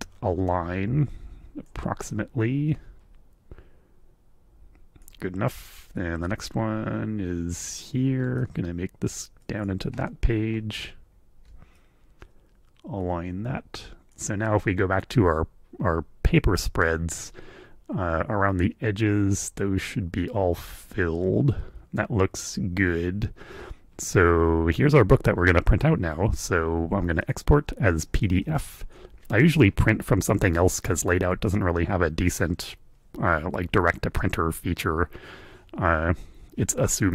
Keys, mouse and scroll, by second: 2.1-5.2 drag, 5.3-6.4 drag, 8.4 ctrl+click, 9.4 click, 9.9 middle click, 11.8-14.5 drag, 14.8 click, 27.2 click, 28.4 super+click.